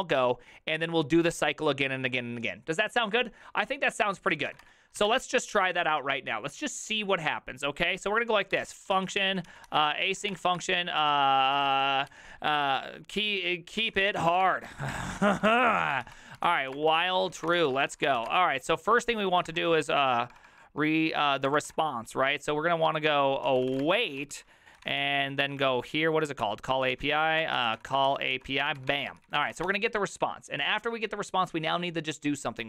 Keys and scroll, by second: 4.5 ctrl+c, 4.5 ctrl+:, 4.6 w, 4.7 Return, 5.0 shift+o, 5.1 Return, 8.9-12.6 typing, 13.7-21.8 typing, 23.2-25.4 typing, 25.7 ctrl+s, 26.4 ctrl+n, 27.0-30.2 typing.